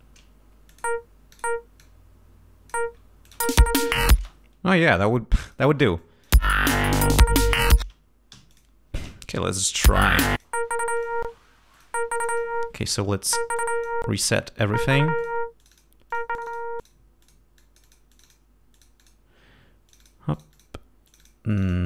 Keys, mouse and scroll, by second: 0.7 click, 1.3 click, 1.8-2.9 drag, 3.2 click, 3.4 space, 4.2 space, 5.1 click, 6.0 click, 6.3 space, 7.8 space, 8.3 g, 8.5 click, 9.8 l, 10.4 click, 11.0 click, 11.7 click, 12.1 click, 13.6 click, 14.1 click, 15.2 click, 15.6 click, 16.1 click, 16.8 click, 17.2 click, 17.6 click, 18.7 click, 19.9 click, 20.3 click, 21.1 click, 21.5 click.